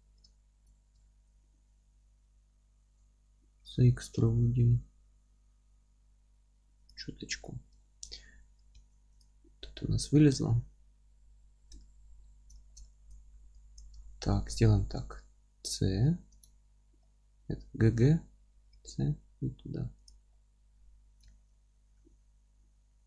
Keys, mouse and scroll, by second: 0.0-0.3 scroll up 1, 0.7 scroll up 1, 3.6 e, 6.9 click, 7.1 scroll down 1, 7.4-9.2 middle drag, 7.6 scroll up 1, 8.5-8.8 scroll up 1, 8.8 Tab, 9.2 click, 9.5 scroll up 1, 9.7 Tab, 11.0 F3, 11.8-13.8 alt+middle drag, 12.3 alt+z, 13.2 1, 13.8 click, 14.0-15.0 alt+middle drag, 15.0-16.3 scroll up 2, 16.3 scroll up 1, 16.3 middle click, 16.3 c, 16.4 right click, 17.0-20.1 middle drag, 17.6 g, 20.1 click, 20.3-20.7 scroll down 2, 20.7 F3, 21.3-23.0 alt+middle drag, 21.5-22.0 scroll up 2, 22.0 g.